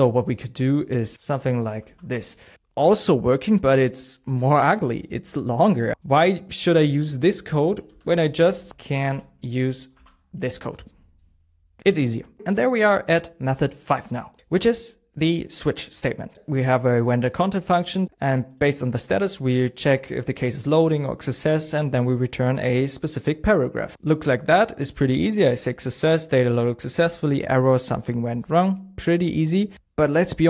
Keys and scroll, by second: 1.2 alt+f, 7.8 super+z, 10.0 super+s.